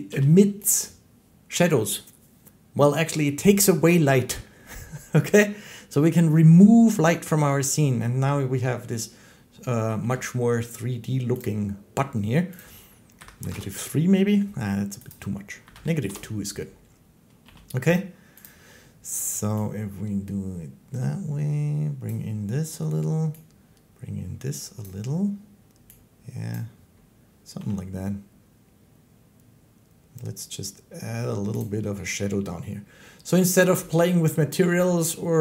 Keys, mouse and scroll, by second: 0.0 g, 0.6 click, 9.8 g, 11.3 click, 12.5 click, 13.1 typing, 13.4 Return, 15.0 click, 15.6-16.2 typing, 15.9 Return, 17.3 g, 18.4 click, 21.9 click, 24.7 click, 26.4 click, 27.4 g, 31.5 click, 32.7-35.4 drag.